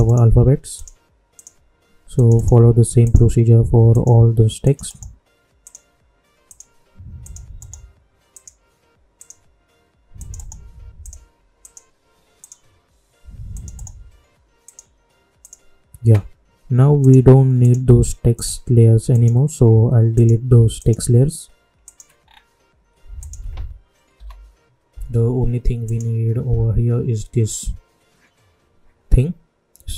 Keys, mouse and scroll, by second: 0.0 right click, 0.7 click, 2.3 right click, 3.0 click, 4.8 right click, 5.6 click, 7.5 right click, 8.3 click, 10.3 right click, 11.0 click, 13.7 right click, 14.6 click, 22.2-22.9 scroll down 1, 23.1 ctrl+click.